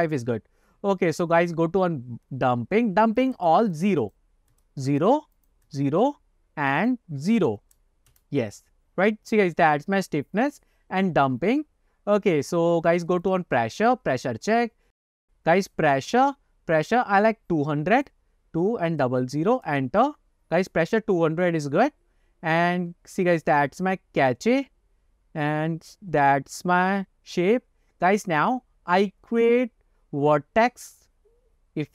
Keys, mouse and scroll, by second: 1.1 scroll down 1, 3.3 click, 4.1-5.3 drag, 5.5-7.1 drag, 7.5-8.5 drag, 9.4-10.3 scroll up 1, 10.3 scroll up 1, 11.9-12.6 scroll down 5, 13.6 click, 18.1-20.1 drag, 19.3 KP_0, 22.2 scroll down 2, 23.4 click, 23.8-25.1 scroll down 4, 25.5 click, 26.1-27.1 scroll down 4.